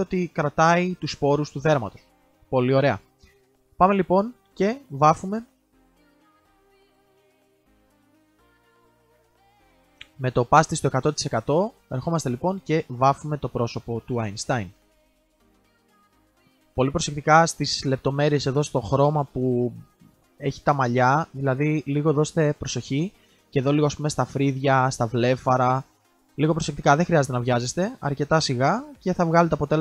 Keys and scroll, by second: 1.1 ctrl+z, 1.3 ctrl+z, 5.5 ctrl+z, 5.7 ctrl+z.